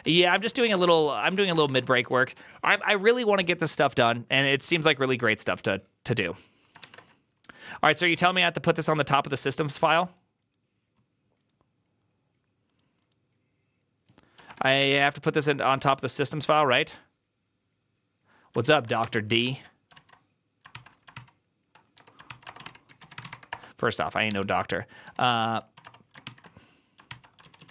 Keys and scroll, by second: 0.3-2.6 typing, 6.7 alt++, 7.9 alt+f, 18.5 ctrl+a, 18.8 ctrl+c, 19.8 alt+{, 20.6 ctrl+c, 21.0 ctrl+t, 21.8-27.5 typing, 22.1 ctrl+c, 26.1 ctrl+v.